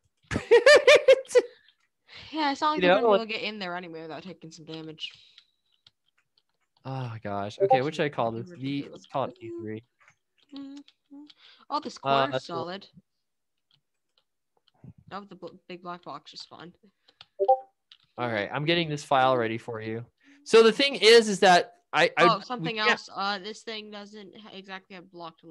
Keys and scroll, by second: 0.2 a, 1.0 w, 2.3 d, 3.6-19.7 typing, 21.0-23.7 typing.